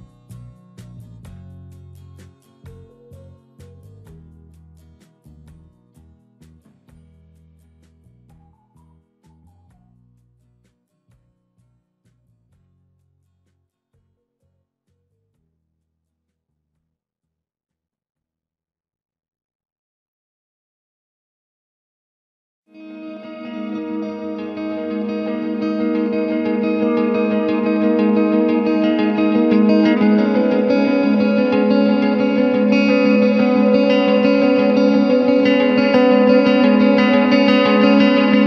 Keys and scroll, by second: 5.2 space, 12.8 space, 16.5 ], 18.6 space, 21.4 space, 26.0 w, 27.6 Return, 28.5 ctrl+m, 30.0 Return, 30.8 ctrl+KP_Subtract, 31.4 ctrl+b, 32.7 Return, 33.1 space, 34.4 space, 35.2 f, 35.4 space.